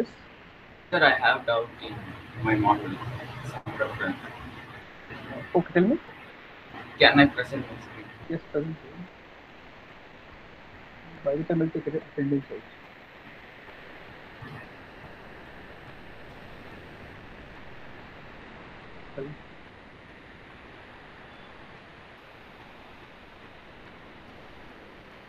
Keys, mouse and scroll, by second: 5.0 click, 7.4 click, 11.0 click, 13.0-13.4 scroll, 15.1 click, 15.7 middle click, 17.3 click, 17.3-17.7 scroll, 21.8-22.1 scroll, 23.4 click, 24.6 click.